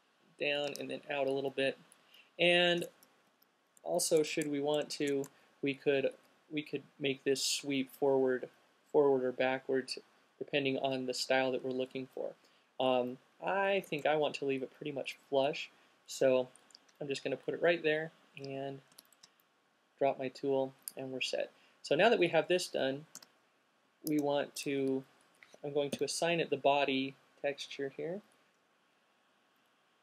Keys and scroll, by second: 3.4 alt+super+z, 5.1 alt+shift+super+z, 5.2 alt+shift+super+z, 14.2 alt+super+z, 18.9 alt+q, 23.3 q, 26.2 m.